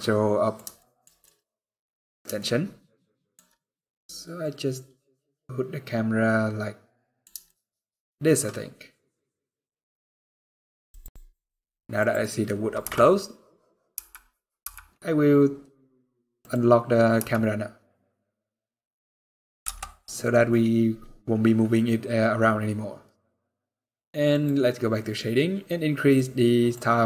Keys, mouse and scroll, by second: 0.5 shift+middle click, 1.0 middle click, 2.1 shift+middle click, 3.3 middle click, 7.2 shift+middle click, 10.6 click, 12.5 n, 16.1 click, 16.9 n, 17.2 scroll down 3, 17.4 scroll up 1, 17.8 scroll down 1, 17.9 scroll down 1, 18.0 middle click, 19.3 KP_0, 20.2 middle click.